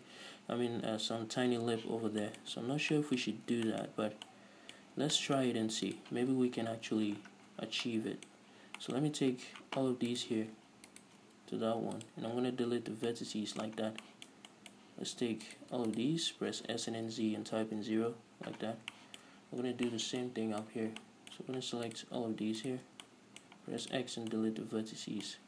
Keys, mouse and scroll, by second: 2.4 scroll down 1, 3.1 Tab, 3.7-4.6 scroll up 4, 6.2 right click, 6.9 KP_Decimal, 7.5 scroll down 2, 8.2-10.5 middle drag, 8.7-9.1 scroll up 2, 10.5 right click, 11.5 ctrl+shift+right click, 11.8 x, 13.2 scroll down 2, 13.4-15.8 middle drag, 14.1 scroll down 2, 15.8 right click, 16.5 ctrl+right click, 16.8 s, 18.5 Return, 19.0 scroll down 2, 19.3-22.2 shift+middle drag, 19.9-20.2 scroll down 2, 21.0-21.4 scroll up 2, 22.2-23.4 right drag, 23.4-25.4 middle drag, 23.8 x.